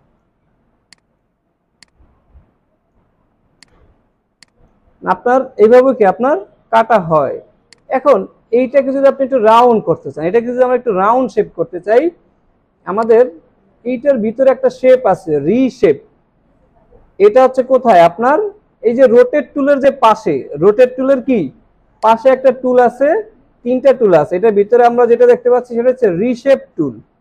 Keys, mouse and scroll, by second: 0.6 alt+scroll down 2, 4.4 space, 7.6 space, 13.0 right click, 17.8 right click, 22.1 right click.